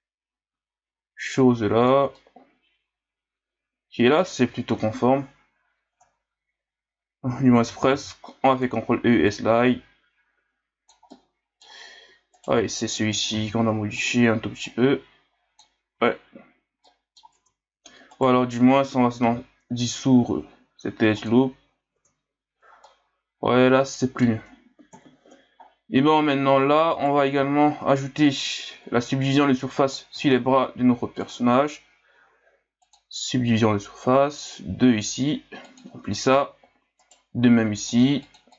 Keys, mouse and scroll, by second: 4.7 KP_1, 5.9 Tab, 7.9 ctrl+e, 11.1-12.3 middle drag, 12.3 alt+right click, 13.3 ctrl+e, 16.0 Tab, 16.2 a, 16.8 middle click, 17.3 Tab, 18.1 alt+right click, 19.2 x, 21.9 Tab, 22.8-24.9 middle drag, 24.9 KP_1, 25.6 scroll down 4, 26.3 scroll down 1, 26.9 right click, 27.5 scroll down 5, 28.2-29.9 scroll down 3, 29.9-30.3 scroll up 3, 33.0-34.2 drag, 34.4-37.0 drag, 37.0 right click, 37.8 click, 38.2 click.